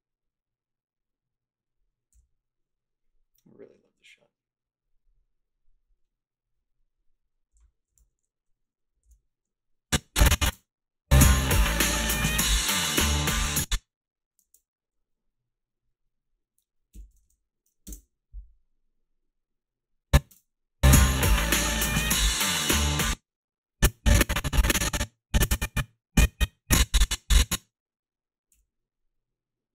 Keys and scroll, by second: 2.2 f, 7.6-8.5 typing, 9.1 ctrl+r, 10.5 space, 13.3 space, 14.5 alt+shift+s, 16.7-17.8 typing, 17.8 Return, 20.4 space, 22.9 space, 28.6 f.